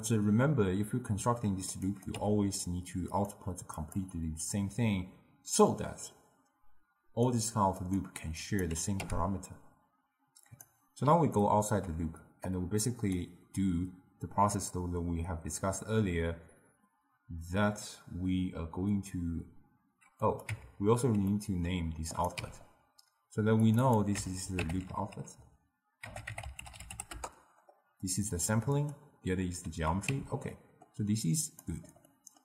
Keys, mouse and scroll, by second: 0.0-2.1 drag, 2.2 n, 3.2 click, 3.8-8.0 drag, 8.5 click, 9.1 n, 10.5-11.5 drag, 11.5-12.6 ctrl+middle drag, 12.6-15.6 drag, 20.3 click, 20.6 Tab, 21.4 middle click, 22.2 click, 22.5 n, 23.7 click, 23.9-25.0 drag, 25.0 o, 28.8 click, 30.2 n, 30.6 scroll up 1, 30.6-31.5 middle drag, 31.5 click, 32.2-32.4 middle drag.